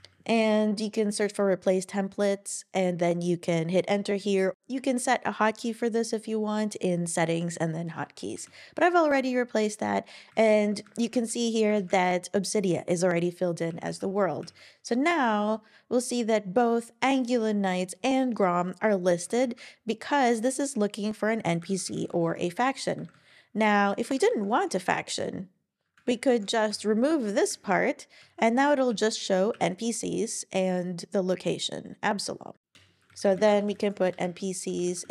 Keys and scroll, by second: 2.0 typing, 10.8 super+Right, 11.1 super+Left, 11.7 alt+shift+Left, 13.7 Page_Up, 13.9 Up, 14.4 Up, 19.4 Down, 20.3 Down, 21.6 alt+Right, 21.8 alt+Right, 24.3 shift+super+Right, 26.0 alt+shift+Left, 26.7 BackSpace, 27.5 space, 32.7 Return, 33.1 shift+3, 33.2 shift+3.